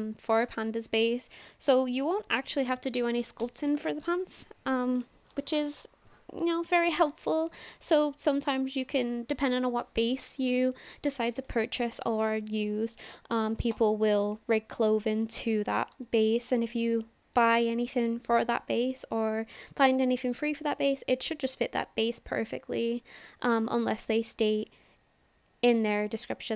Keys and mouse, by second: 14.8-15.6 drag, 16.1-16.4 shift+drag, 16.7-17.4 drag, 22.7 drag, 22.9-23.8 middle drag.